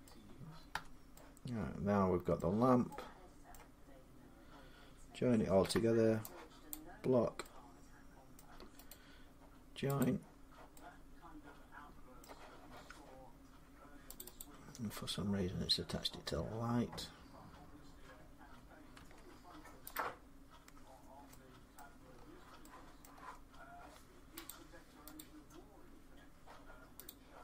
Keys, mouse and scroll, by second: 0.5 Tab, 2.2 scroll up 1, 3.3 middle click, 5.4 b, 6.5 click, 8.2 middle click, 8.7 right click, 9.8 click, 12.0 middle click, 14.0 click, 14.2 click, 18.8 Tab, 19.8 click, 21.6 middle click, 21.8 scroll up 7, 22.8 middle click, 23.0-24.2 scroll down 6, 24.3 click, 25.0 click, 26.9 click.